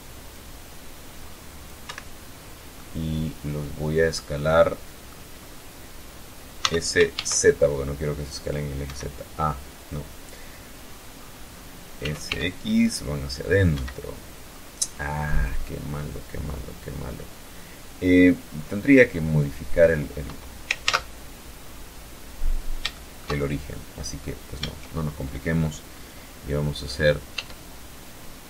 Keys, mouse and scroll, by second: 0.3 Escape, 0.6-0.9 scroll up 1, 1.2-3.7 middle drag, 3.9 scroll up 1, 5.1 s, 5.6 shift+z, 7.3 Escape, 10.4 s, 10.7 x, 12.2 Escape, 12.9-13.2 scroll up 2, 13.6-13.9 scroll down 2, 16.6-17.2 scroll down 4, 19.2 ctrl+z, 20.2 scroll down 2, 21.0 scroll down 3, 21.4 shift+middle click, 22.7 middle click, 25.7 e, 28.0 Escape.